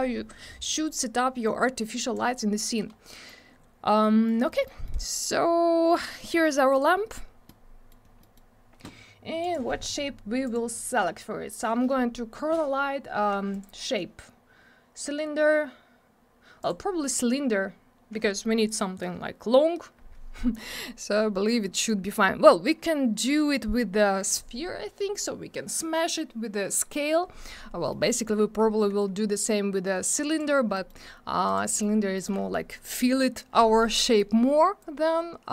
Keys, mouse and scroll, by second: 0.6 click, 2.5 middle click, 2.9 scroll down 1, 3.1 middle click, 3.4 scroll up 1, 4.0 middle click, 4.5 middle click, 4.8 middle click, 5.0 double middle click, 5.2-5.6 scroll up 1, 6.1 middle click, 6.7 click, 6.8 double click, 7.5 middle click, 8.0 scroll down 1, 8.2 middle click, 9.4 click, 10.4 click, 13.5 click, 16.6 click, 20.7 middle click, 21.0 scroll up 1, 21.8 click, 27.9 middle click, 30.3 click, 30.7 middle click, 31.4 click, 31.6 middle click, 31.9 scroll up 1, 32.1 middle click, 32.2 double middle click, 33.9 middle click, 34.8 click.